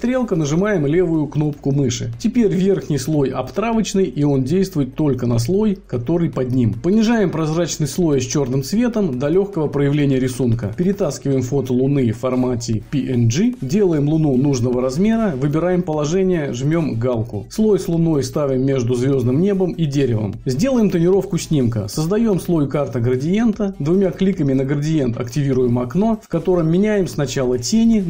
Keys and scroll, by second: 22.2 ctrl+KP_Add.